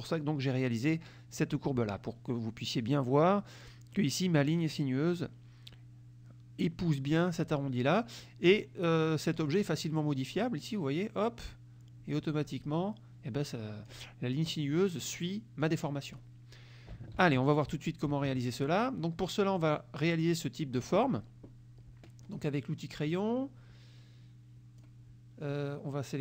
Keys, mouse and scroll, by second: 8.5 click, 9.4 click, 10.5-14.1 drag, 15.6 click, 17.2 ctrl+z, 18.3 ctrl+F1, 18.6 ctrl+click, 19.5 click, 22.3 click, 23.2-25.1 drag.